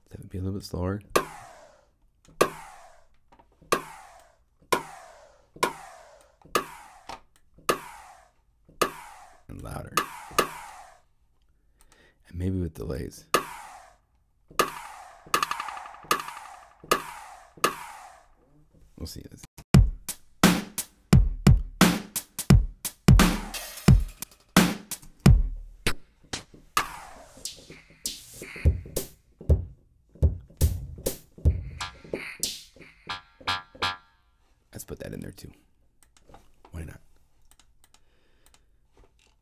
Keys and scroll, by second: 19.4 Home, 25.0 0.